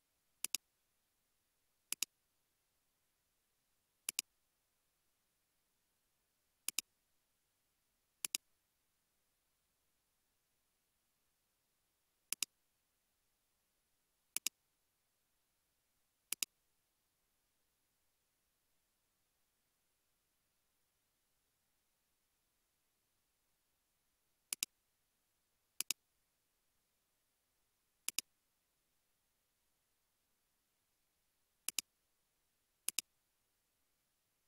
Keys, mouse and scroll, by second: 2.7 typing, 4.9 scroll up 1, 6.1 scroll, 6.2 g, 10.4-11.3 typing, 12.8-13.8 typing, 16.9 scroll down 1, 17.7 typing, 18.4 scroll down 1, 19.0 scroll up 1, 19.8 typing, 26.8 scroll down 1, 27.6 typing, 32.4 typing.